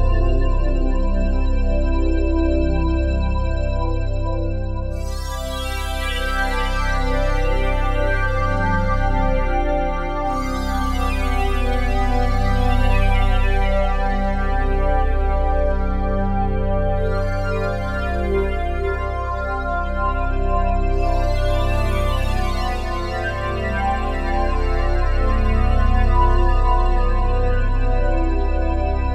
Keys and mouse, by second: 0.0 click, 2.8-4.2 drag, 4.7 click, 6.4 0, 7.4-9.1 alt+shift+drag, 10.2 click, 10.3-11.7 typing, 11.9 Return, 13.6 click, 13.6-13.9 typing, 13.9 click, 14.4 click, 15.0 click, 15.7 Delete, 16.4 click, 16.7 click, 16.9-17.8 typing, 19.0-21.2 drag, 21.5 click, 22.2 click, 22.9 click, 23.5-25.4 drag, 25.6 click, 25.9-26.6 typing, 26.2 click, 28.0 click, 28.6-29.1 typing.